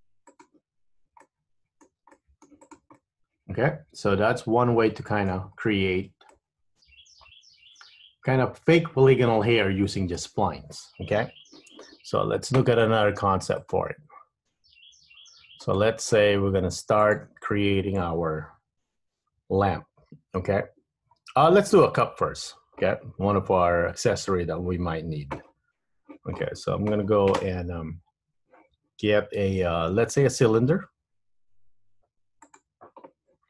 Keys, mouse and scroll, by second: 1.0 Tab, 1.4 middle click, 2.0 Tab, 2.2 middle click, 2.7 click, 3.1 middle click, 5.6-6.1 scroll up 2, 6.5 middle click, 8.9 scroll down 1, 13.7 click.